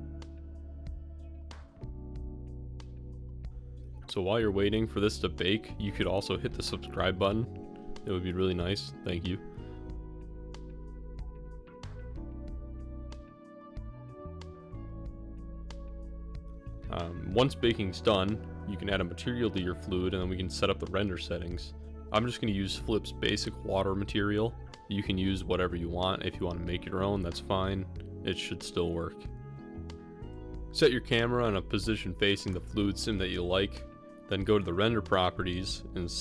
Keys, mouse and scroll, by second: 0.0 middle click, 30.6 middle click, 31.1 middle click, 31.9 shift+middle drag, 33.1 ctrl+alt+KP_0, 34.1 middle click, 35.2 ctrl+alt+KP_0.